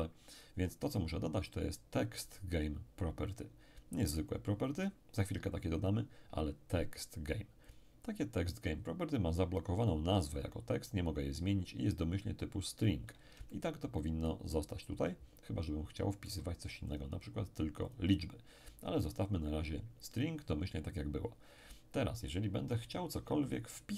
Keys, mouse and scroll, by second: 7.7 click, 13.5-18.9 ctrl+middle drag, 16.9-18.9 ctrl+drag, 19.1 click, 20.7 click.